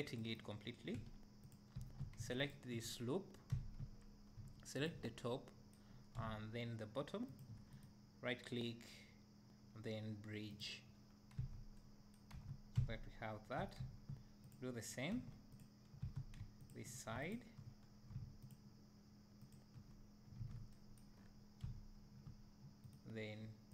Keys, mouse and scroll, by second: 1.5 x, 1.8 2, 2.5 alt+click, 3.5 `, 4.0 scroll up 1, 4.8 shift+click, 7.3 shift+click, 11.4 Tab, 12.5 Tab, 12.8 `, 13.9 3, 14.5 right drag, 14.6 click, 15.6 x, 16.1 2, 16.7 alt+click, 18.5 shift+click, 20.4 ctrl+z, 20.7 right drag, 21.2-21.7 scroll up 2, 21.7 `.